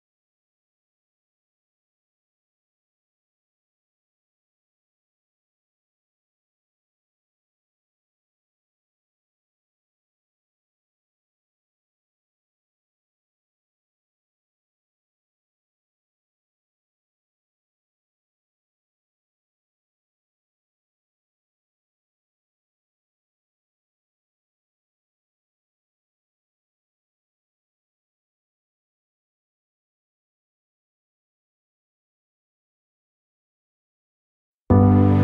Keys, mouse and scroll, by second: 0.0 g, 1.3 alt+click, 1.9 e, 2.5 s, 2.7 ctrl+z, 2.8 click, 3.0 s, 3.6 click, 3.9 e, 5.4 right click, 5.8 g, 6.1 click, 6.3 ctrl+z, 6.4 g, 7.2 alt+click, 7.9 g, 8.4 s, 9.3 click, 10.2 Tab, 10.3 click, 10.8 Tab, 11.0 click, 11.8 KP_1, 12.0-12.7 scroll up 1, 13.1 KP_3, 13.2-13.8 scroll down 1, 13.8 g, 15.2 ctrl+z, 15.6 g, 15.9 ctrl+z, 16.1 KP_7, 16.3-18.7 shift+middle drag, 16.6 g, 18.9-19.5 scroll down 1, 19.5 click, 19.8 scroll down 1, 20.2-24.7 shift+middle drag, 21.2-22.0 scroll up 1, 24.7-30.4 drag, 27.0-27.3 scroll down 1, 27.8 KP_1, 28.9 g, 30.6 s, 33.6 KP_3, 34.4 g.